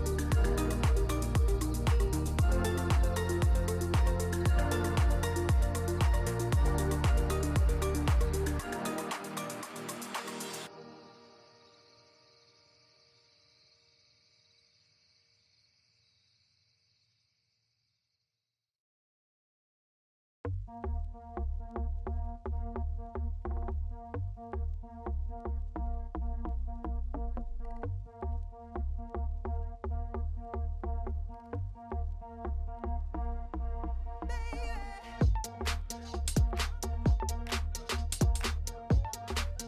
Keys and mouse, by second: 0.0 click, 2.2-3.3 drag, 4.2 middle click, 4.8 middle click, 5.5 middle click, 6.1 click, 6.7 click, 11.4 click, 15.3 click, 18.4 ctrl+s, 19.1 click, 22.7 click, 26.1 ctrl+s, 27.2 click, 27.8 click, 29.1 ctrl+shift+click, 30.0 middle click, 31.0-33.3 shift+drag, 34.4 middle click, 35.1-37.3 drag, 38.6 middle click, 38.9 middle click, 39.3 middle click.